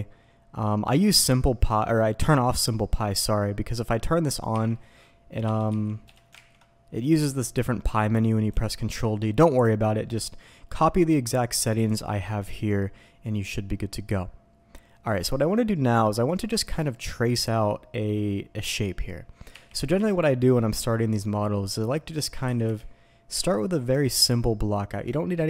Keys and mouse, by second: 5.4 d, 5.7 d, 6.4 ctrl+d, 9.0-14.5 drag, 15.9-16.3 middle drag, 19.5 KP_8, 19.9 KP_7, 22.4 s, 22.6 y.